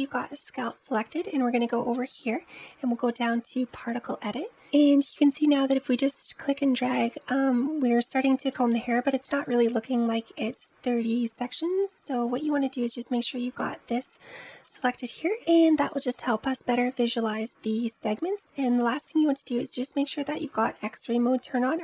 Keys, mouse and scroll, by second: 2.0-4.5 drag, 5.0-8.3 drag, 8.3 scroll up 3, 14.5 click, 16.0-17.8 middle drag, 17.8-20.6 scroll down 5, 20.6 click, 21.4-21.8 middle drag.